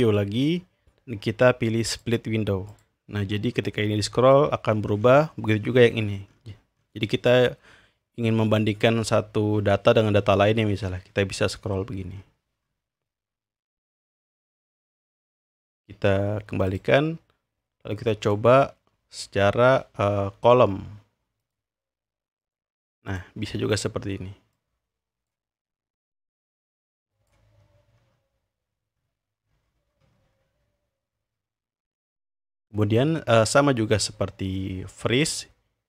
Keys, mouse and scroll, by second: 0.0 click, 1.9 click, 2.7 click, 3.5-5.8 scroll down 3, 5.8-7.5 scroll down 1, 8.8-9.9 scroll down 2, 10.3-11.3 scroll down 2, 11.3-12.3 scroll down 1, 12.3-14.0 scroll up 2, 14.0-15.6 scroll up 1, 16.7-17.7 drag, 18.2 click, 21.4 click, 22.4 click, 24.5-25.3 drag, 26.1-27.3 drag, 27.6-29.3 scroll down 3, 29.3-30.5 scroll up 3, 31.1 scroll up 2, 32.4-33.6 drag, 34.4-34.9 drag.